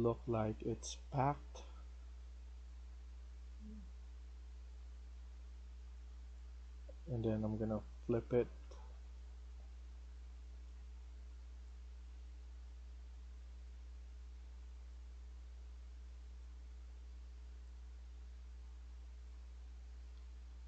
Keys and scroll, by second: 0.0-0.9 typing, 5.1 s, 8.2-9.1 typing, 13.0-13.8 typing, 19.5-20.6 typing.